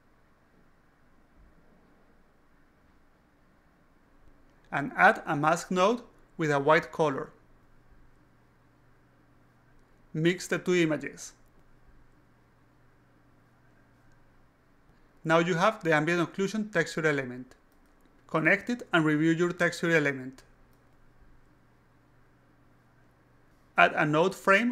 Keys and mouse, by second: 0.0-1.8 typing, 2.4 alt+click, 3.0-4.2 drag, 4.8 click, 5.3 click, 6.8 click, 8.1 click, 9.0 click, 9.1 click, 9.5 click, 10.2 click, 10.7-12.1 drag, 13.0 click, 14.4 click, 14.7 click, 15.4 click, 15.6-17.3 typing, 17.5 alt+click, 18.6 click, 20.0 click, 21.5-22.9 alt+drag, 24.0-24.7 alt+drag.